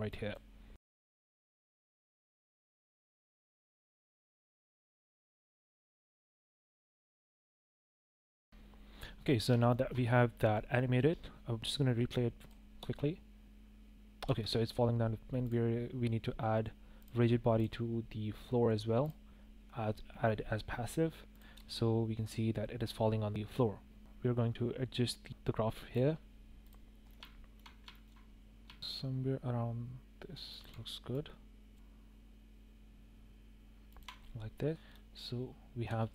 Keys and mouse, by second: 0.1 click, 1.6 i, 2.1 shift+click, 2.3 click, 4.3 g, 4.4 y, 4.9 g, 7.1 g, 8.5 o, 8.7 i, 9.6 shift+click, 10.5-10.8 drag, 10.9 space, 11.2 space, 12.7 space, 14.2 space, 16.9 click, 17.5-19.0 drag, 21.5 space, 23.3 space, 25.0-25.4 drag, 25.6 click, 25.9 shift+click, 26.2 shift+click, 26.5 shift+click, 26.7 s, 27.3 click, 27.9 s, 28.6-29.0 drag, 29.0 g, 30.4 g, 32.5 drag, 33.3 s, 33.8 shift+click, 34.5 drag, 34.7 space, 35.8 space.